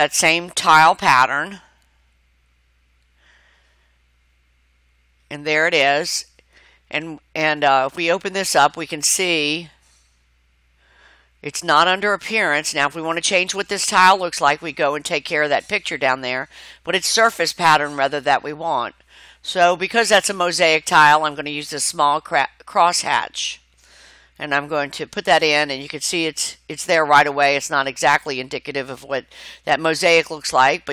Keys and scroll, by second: 0.4-1.9 typing, 1.9 Return.